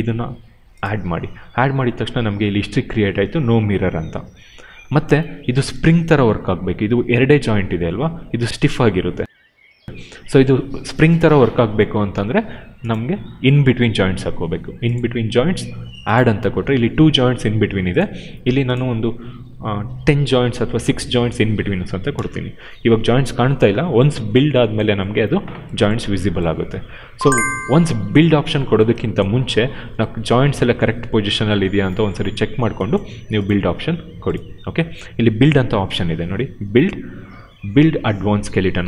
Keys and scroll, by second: 20.9 6, 22.0 Return.